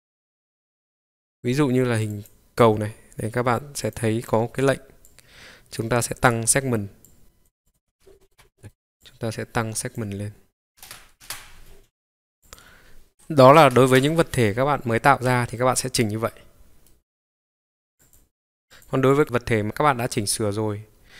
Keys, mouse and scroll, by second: 3.8 click, 7.0 click, 7.6 click, 7.9-8.2 scroll down 4, 8.2 middle click, 8.3 KP_Decimal, 8.5 middle click, 9.0-10.2 drag, 10.5-12.0 drag, 12.4-15.5 drag, 16.3 scroll down 1, 16.8-18.0 middle drag, 16.8 scroll down 2, 18.0-18.8 drag, 19.1 click, 19.6 scroll up 1, 19.7-20.2 scroll down 1, 20.2-20.6 scroll up 3, 21.0 scroll down 1.